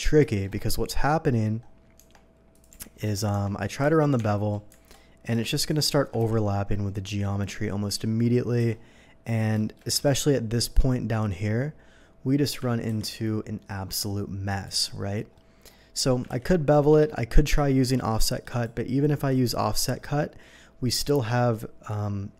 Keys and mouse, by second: 2.0 Tab, 2.7 g, 3.0 Escape, 3.2 g, 3.3 Tab, 4.2 Tab, 6.2 ctrl+b, 7.3-16.2 drag, 8.6 Escape, 13.0 ctrl+b, 14.6 Escape, 16.3 ctrl+b, 16.9 Escape, 16.9 ctrl+b, 17.5 y, 18.2-22.3 drag.